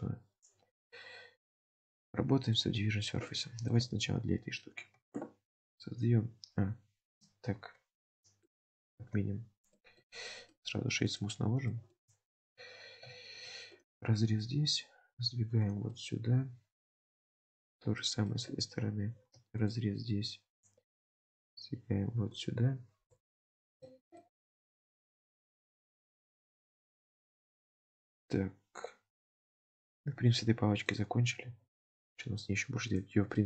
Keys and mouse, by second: 2.0 middle click, 3.4 shift+click, 4.7 shift+click, 9.1 ctrl+z, 9.8 middle click, 11.8 shift+middle click, 12.4 Tab, 13.3 ctrl+r, 16.0-17.5 middle drag, 18.1 shift+middle click, 23.2 alt+z, 23.5 middle click, 23.9 alt+z, 24.3 middle click, 25.3 Tab, 25.7 drag, 26.0-31.0 middle drag, 31.8-32.1 shift+middle drag, 32.9 click, 33.4 shift+drag.